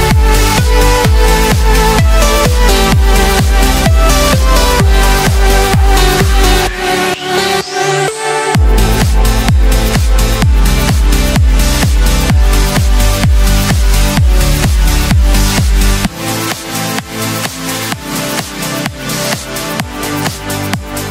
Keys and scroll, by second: 10.4 ctrl+l, 20.1 ctrl+shift+a.